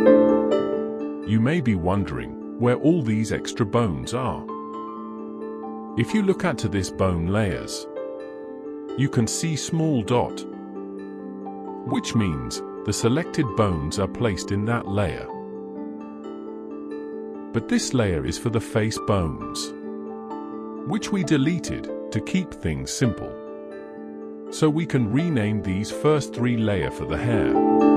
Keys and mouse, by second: 0.2 shift+middle drag, 0.9 alt+middle click, 1.4 middle drag, 2.0 alt+a, 2.3 click, 3.4 l, 4.2 middle click, 4.8 middle click, 5.4 click, 25.6 click, 26.1 click, 27.8 click.